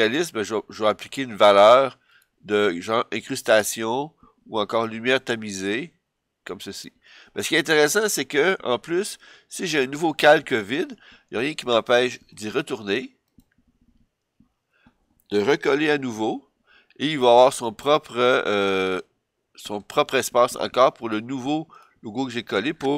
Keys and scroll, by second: 15.7 super+v.